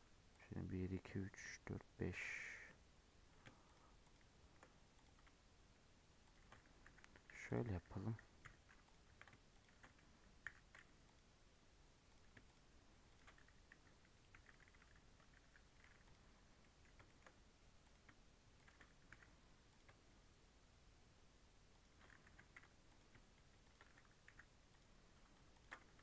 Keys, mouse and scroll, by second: 0.3 click, 3.6 shift+click, 4.0 shift+click, 4.9 click, 6.2 shift+click, 6.8 j, 7.3 3, 7.4 click, 8.4 i, 9.0 1, 9.4 shift+click, 10.4 m, 12.0 click, 12.4 shift+click, 13.0 shift+click, 13.6 k, 14.2 j, 15.3 j, 16.0 click, 16.4 scroll down 1, 16.5-17.8 middle drag, 17.8 click, 18.5 shift+click, 19.0 j, 19.6 click, 21.6 shift+click, 22.2 j, 22.8 click, 23.5 shift+click, 24.2 j, 24.6 click, 25.5 ctrl+click.